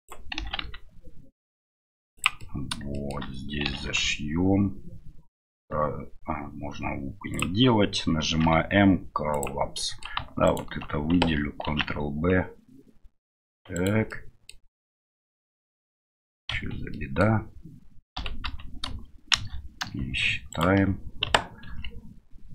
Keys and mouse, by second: 2.5 middle click, 3.0 middle click, 9.7 middle click, 11.7 ctrl+b, 14.1 middle click, 14.4 click, 15.0 click, 15.5 click, 16.5 KP_Divide, 16.9 click, 18.1 a, 19.3 shift+n, 20.5 alt+right click, 21.7 ctrl+b.